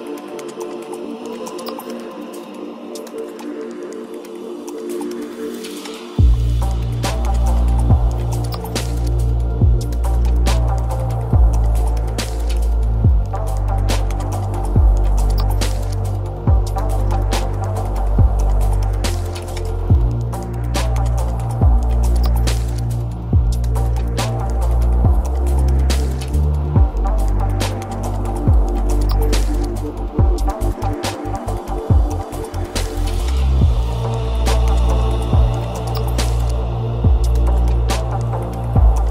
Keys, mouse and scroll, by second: 1.5-3.5 middle drag, 8.1 g, 11.7 g, 16.1-18.1 middle drag, 18.1 g, 22.7-24.0 middle drag, 24.0-24.4 scroll down 2, 24.4-25.6 middle drag, 25.6 shift+d, 30.9-32.4 middle drag, 32.4 g, 34.6-35.8 middle drag, 35.8-36.1 scroll down 2, 36.1-36.6 shift+middle drag, 36.6 scroll up 2, 37.1-38.8 shift+middle drag.